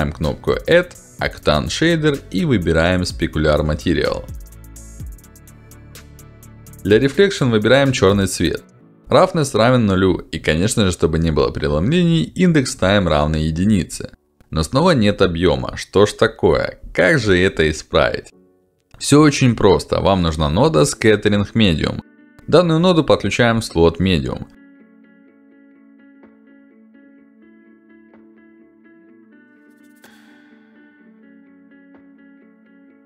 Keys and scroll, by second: 13.4 1, 14.1 Return, 22.5-23.4 typing, 24.5 ctrl+alt+d.